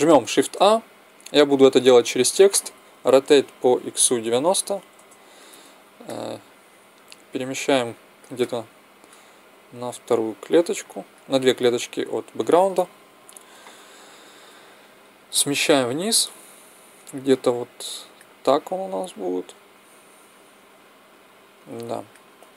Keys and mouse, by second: 0.2 shift+a, 2.8 r, 7.3-10.7 middle drag, 8.4 typing, 10.7 click, 13.0 KP_0, 18.9-21.4 drag.